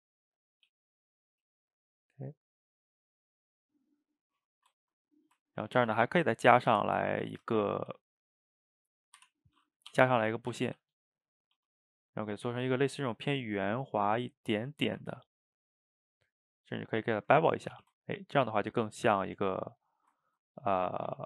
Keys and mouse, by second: 0.7 g, 1.7-3.0 middle drag, 3.0 click, 3.3-4.6 middle drag, 4.6 shift+right click, 4.8 ctrl+middle click, 5.7 ctrl+r, 6.9 middle click, 7.7 g, 14.0-15.1 middle drag, 15.1 ctrl+b, 17.2 middle drag, 17.3 Tab, 17.7 a, 17.8 a, 18.0-20.0 ctrl+middle drag, 20.0 shift+right click, 20.2-21.1 ctrl+middle drag, 21.1 click.